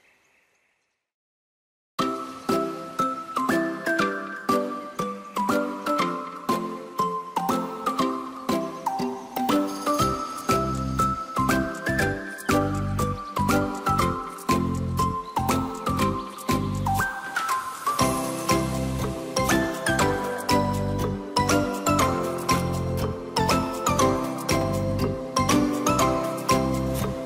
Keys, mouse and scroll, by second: 0.6 click, 2.8 click, 4.3 scroll down 1, 4.5-6.0 middle drag, 6.0 click, 8.1 click, 10.2 ctrl+z, 10.9 click, 13.0 click, 15.8 click, 16.0-16.6 scroll down 3, 16.6-19.2 middle drag, 19.3-22.0 middle drag, 25.4-25.8 scroll up 1, 25.8 click, 26.5 shift+click, 26.9 shift+click.